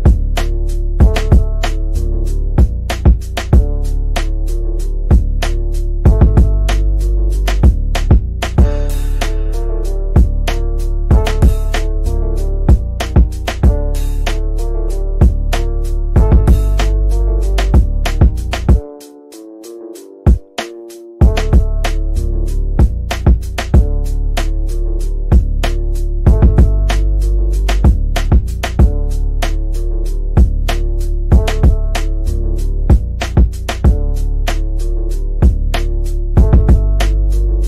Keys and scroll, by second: 11.8 c, 14.0 F3, 30.3 F3, 30.7 Escape.